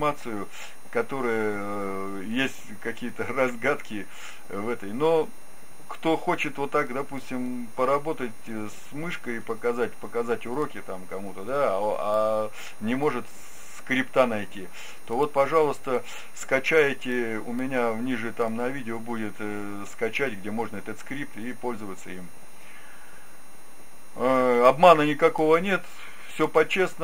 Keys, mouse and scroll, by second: 8.5-11.3 middle drag, 26.9-27.0 middle drag.